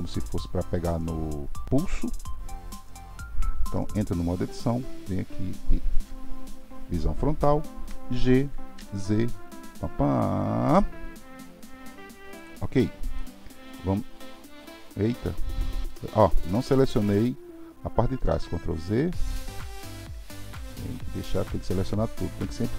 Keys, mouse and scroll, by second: 3.7 Tab, 6.0 KP_1, 7.8 g, 13.2-16.2 middle drag, 18.3 ctrl+z, 19.0-20.4 middle drag, 20.4 shift+click, 20.8-22.7 middle drag.